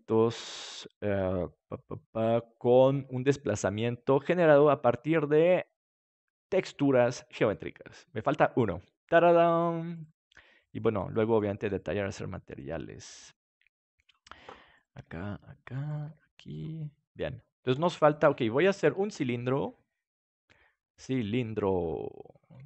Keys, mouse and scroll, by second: 9.9-11.1 right drag, 11.1 middle click, 12.8 g, 14.0-15.5 drag, 14.7 right click, 14.9 g, 16.0 g, 17.3 middle click, 17.7 ctrl+s, 20.9-22.6 drag.